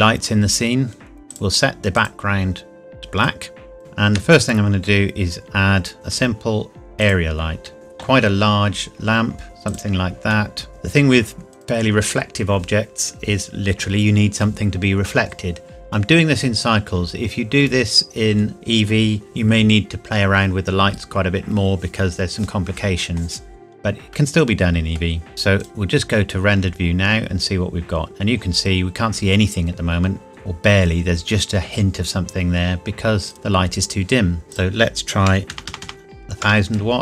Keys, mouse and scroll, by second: 0.0 scroll down 1, 1.3 click, 3.8 shift+a, 7.0 click, 7.7 s, 9.7 click, 10.3 shift+middle click, 10.7 g, 11.5 click, 24.1 middle click, 25.6 click, 30.3-32.5 scroll up 1, 33.3 click, 35.2 KP_1, 35.5 KP_0, 36.4 KP_Enter.